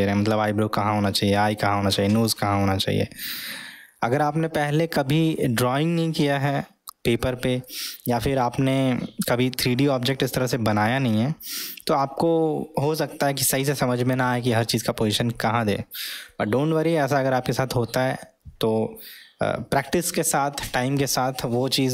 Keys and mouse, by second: 4.3-4.8 middle drag, 5.0-7.7 middle drag, 8.1-8.6 middle drag, 8.9-9.4 middle drag, 10.4-10.9 middle drag, 14.3-14.8 middle drag, 15.4-16.1 middle drag.